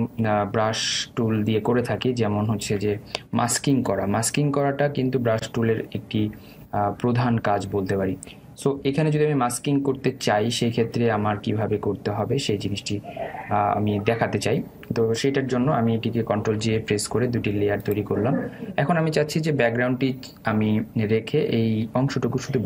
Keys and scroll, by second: 4.3 Delete, 17.2 ctrl+j.